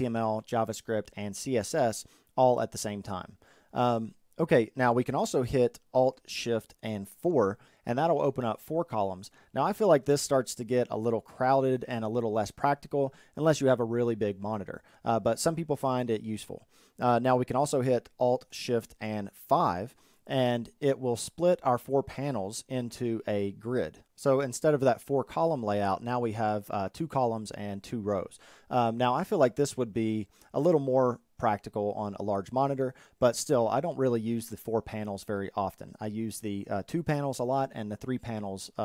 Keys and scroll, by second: 5.9 alt+shift+4, 18.1 alt+shift+5.